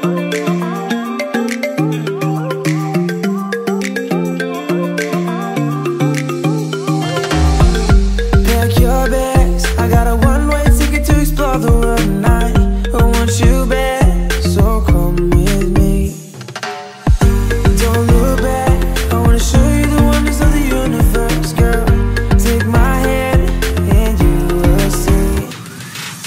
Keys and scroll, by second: 7.0 Delete, 17.7 space, 22.5 Return.